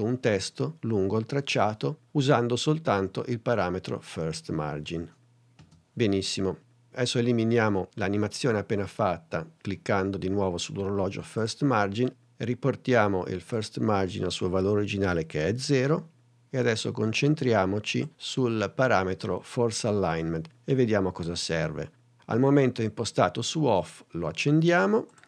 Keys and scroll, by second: 5.6 space, 15.5 0.